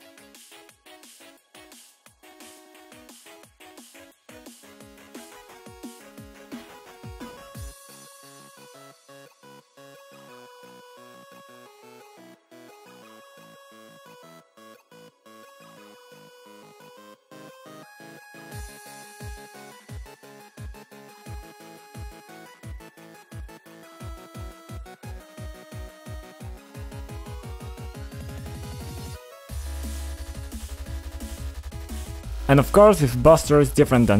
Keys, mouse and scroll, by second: 0.0 click, 0.5 click, 1.5 typing, 1.8 Return, 2.7 scroll down 2, 3.2 click, 3.4 click, 3.5 ctrl+click, 4.7 click, 4.9 double click, 5.9 click, 6.3 6, 6.4 Return, 13.5 click, 14.9 b, 15.3 click, 16.6 ctrl+click, 17.1 click, 17.2 double click, 17.8 double click, 21.5 click, 22.2 click, 22.7 0, 22.8 Return, 23.2 click, 23.4 shift+click, 23.5 click, 23.8 click, 25.3 click, 25.4 click, 26.1 click, 26.4 double click, 26.5 double click, 26.8 double click, 26.8 double click, 27.9 click, 29.0 click, 29.6 click, 30.9 click, 31.0 click, 31.8 scroll up 1, 32.0-32.4 scroll down 1, 32.7 click, 33.4 ctrl+click, 34.0 click.